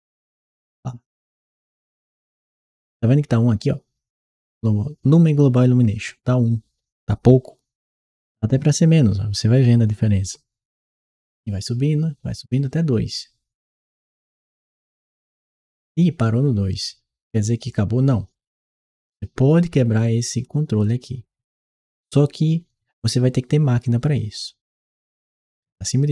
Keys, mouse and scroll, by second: 0.0 e, 7.7-15.1 drag, 19.8 click, 20.6 click.